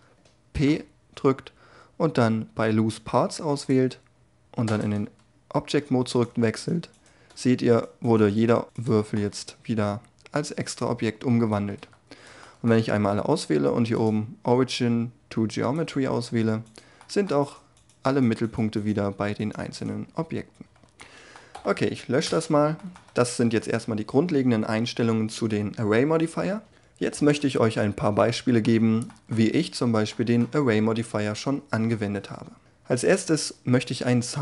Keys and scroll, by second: 0.4 p, 4.2 Tab.